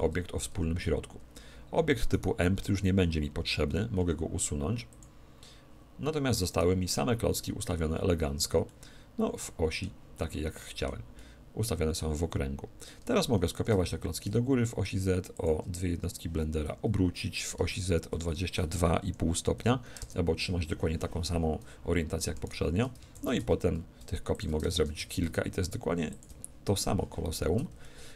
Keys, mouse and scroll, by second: 0.5 Tab, 2.1-3.8 right drag, 4.0 x, 6.5-8.2 right drag, 8.7-12.9 middle drag, 13.6 shift+d, 15.4-17.2 drag, 16.6 r, 22.4-24.2 right drag, 23.1 shift+d, 24.4-26.1 drag, 24.8 shift+d, 26.2-27.8 drag, 27.8-28.1 middle drag.